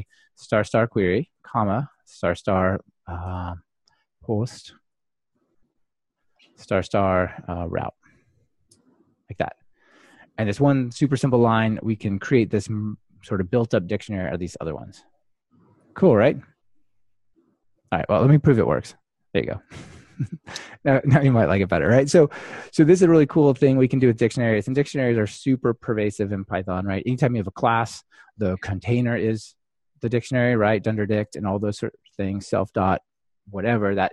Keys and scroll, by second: 1.3 Return, 5.9 Return, 18.5 ctrl+r.